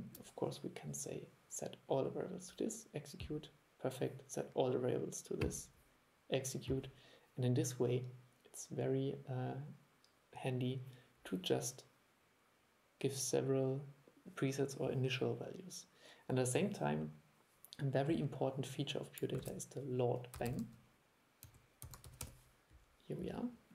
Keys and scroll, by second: 19.5 super+1.